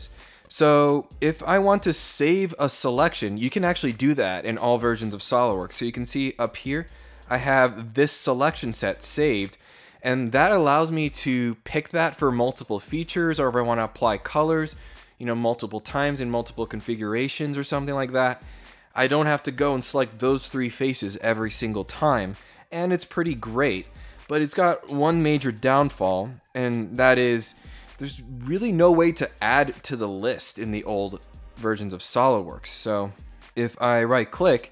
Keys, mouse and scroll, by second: 6.2 click, 7.6-7.9 scroll down 2, 8.9 scroll down 1, 25.8 click, 32.9 right click.